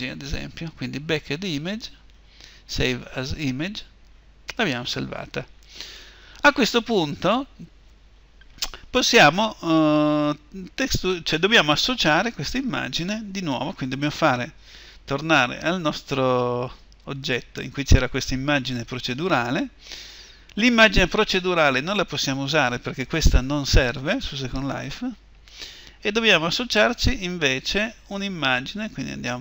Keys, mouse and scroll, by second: 3.9-29.4 drag.